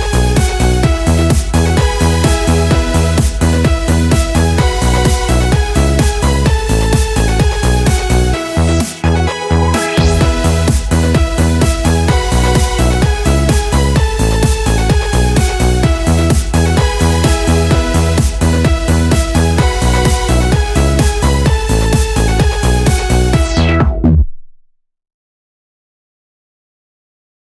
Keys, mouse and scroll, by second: 0.6 click, 1.4 click, 2.2 middle click, 2.6-3.7 drag, 3.7 right click, 4.0 middle click, 4.5 r, 6.1 right click, 6.4 middle click, 7.2 right click, 7.4 middle click, 7.7 r, 8.7 right click, 9.4 click, 9.8 right click, 10.5 click, 11.6-12.7 middle drag, 12.8 right click, 13.5 l, 13.9 middle click, 14.1 middle click, 15.4 r, 16.3 right click, 18.6 middle click, 19.6 scroll down 1, 19.8 middle click, 20.2 click, 21.5 right click, 22.0 r, 22.9-24.2 right drag, 23.7-24.7 middle drag, 24.2 r, 25.2 right click, 26.8 click.